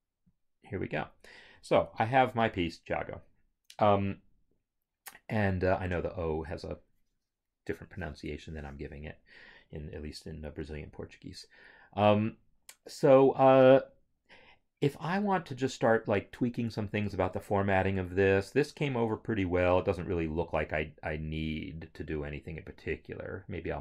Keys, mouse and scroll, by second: 0.3 click, 1.7 Home, 20.5 scroll, 21.5 scroll, 22.3 scroll.